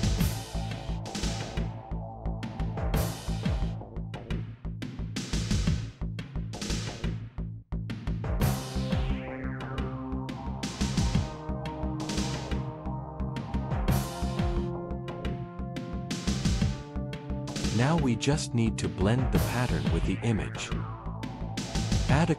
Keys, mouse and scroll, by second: 0.2 ctrl+v, 1.2 click, 1.8 BackSpace, 2.5 Return, 2.7 Return, 3.3 click, 3.9 BackSpace, 5.1 ctrl+v, 6.1-8.0 typing, 9.0 Left, 9.3 Left, 11.3 BackSpace, 12.0 BackSpace, 12.1 Return, 14.6-15.0 drag, 19.1 click, 19.3 click.